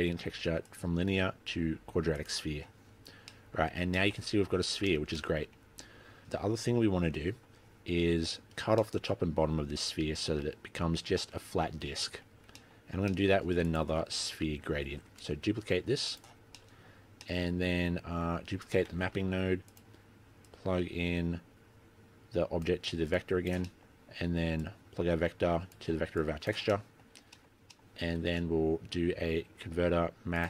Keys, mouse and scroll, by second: 0.6 click, 3.0 middle click, 3.2 scroll up 5, 3.6 middle click, 4.5-5.7 scroll down 8, 4.7 middle click, 5.7 middle click, 5.9-6.4 scroll up 3, 6.4 middle click, 8.0-8.9 scroll down 8, 8.9 middle click, 12.5-12.9 scroll down 4, 12.7 middle click, 12.9-14.1 scroll up 8, 13.1 middle click, 13.7 click, 15.0 shift+d, 16.4-16.8 scroll down 6, 16.7 middle click, 17.0 scroll up 4, 17.3 middle click, 18.7 click, 19.0 shift+d, 20.6 click, 23.3 click, 23.8 middle click, 24.1-24.8 scroll up 4, 24.8 click, 26.3 click, 26.8 middle click, 27.2-27.5 scroll down 5, 27.4 middle click, 27.5-28.1 scroll up 3, 27.7 middle click, 28.3 shift+a.